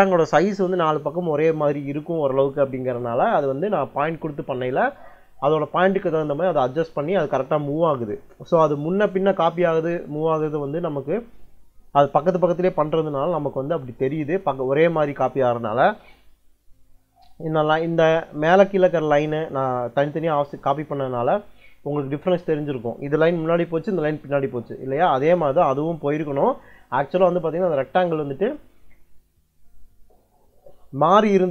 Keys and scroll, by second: 25.1 Escape.